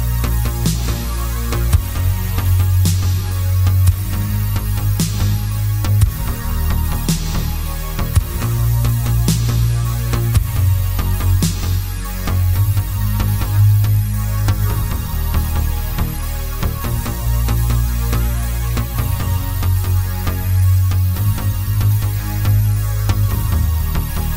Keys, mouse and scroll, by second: 0.8 KP_7, 1.3 scroll down 1, 1.7 shift+z, 1.9 scroll up 1, 2.7 shift+right click, 3.5 shift+a, 6.4 click, 6.9 KP_3, 7.5 g, 8.8 click, 8.9-10.3 middle drag, 9.6 s, 10.3 click, 10.4 s, 11.8 click, 12.0-15.0 middle drag, 13.0 shift+z, 13.7 g, 15.0 click, 15.3 r, 16.1 Escape, 16.3 y, 16.9 r, 17.5 click, 17.6-21.2 middle drag, 20.6 s, 21.2 click, 21.3-23.4 middle drag, 22.2 g, 23.4 click, 23.6-24.3 middle drag.